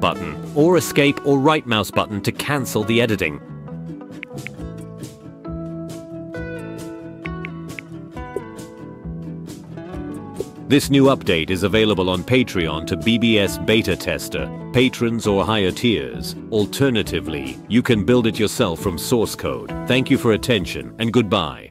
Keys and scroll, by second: 4.2-8.3 typing, 7.5 Up, 10.3 space.